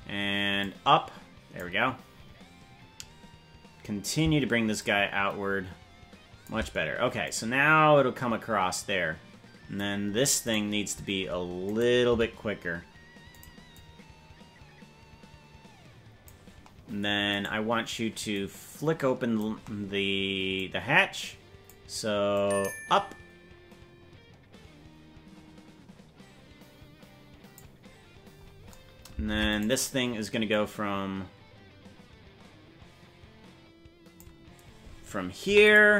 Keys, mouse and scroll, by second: 0.6-1.6 drag, 4.7-6.5 shift+drag, 7.2-9.8 drag, 11.6 right click, 12.0 g, 13.7-16.3 drag, 17.4 right click, 18.3-19.4 drag, 20.5-21.7 drag, 22.3-27.6 drag, 29.3 ctrl+Tab, 29.6 right click, 30.5-34.2 drag, 35.6 i.